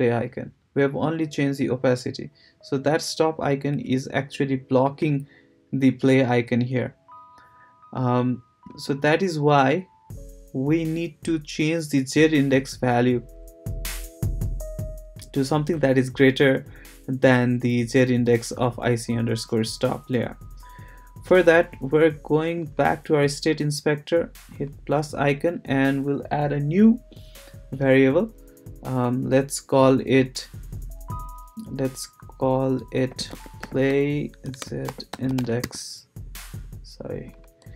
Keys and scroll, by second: 32.9-36.1 typing.